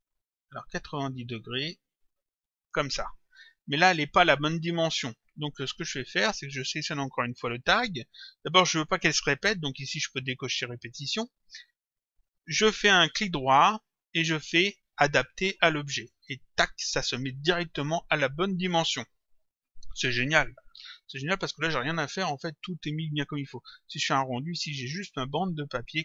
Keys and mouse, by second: 3.7 click, 6.3 click, 9.9 click, 13.1 right click, 16.1 click, 23.9 click.